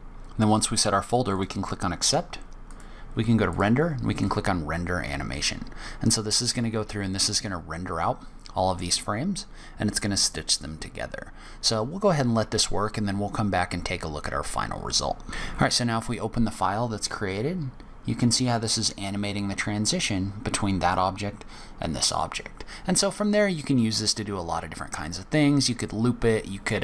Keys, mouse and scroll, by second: 2.6 click.